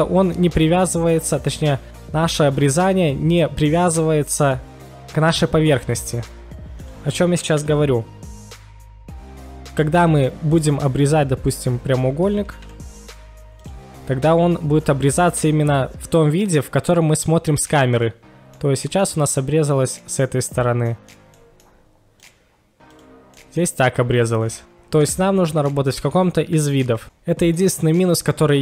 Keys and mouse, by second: 6.8 ctrl+shift+x, 8.2-18.1 middle drag, 18.5-19.1 middle drag, 20.6-20.9 middle drag, 21.4-22.2 middle drag, 22.2 drag, 22.9 click, 23.3 middle click, 24.6 ctrl+z, 24.8 ctrl+z, 25.4-25.7 middle drag, 27.6 KP_1.